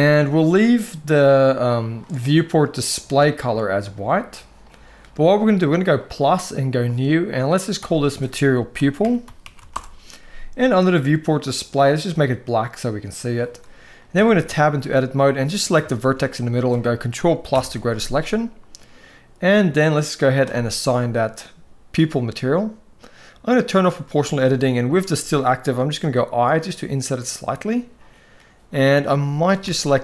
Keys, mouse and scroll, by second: 1.8 click, 2.5 click, 3.3 click, 7.6-9.5 drag, 11.2 click, 13.9 Tab, 14.3 shift+middle click, 15.7 shift+middle click, 17.3 ctrl+KP_Add, 20.1 click, 23.3 click, 25.8 i, 29.4 alt+a.